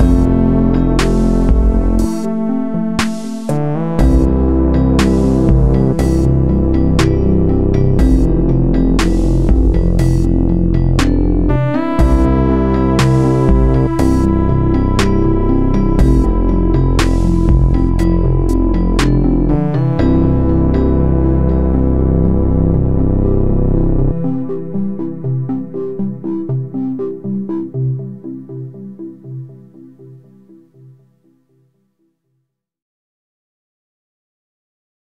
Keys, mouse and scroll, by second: 1.4 b, 7.0 x, 11.6-14.3 drag, 25.8 click.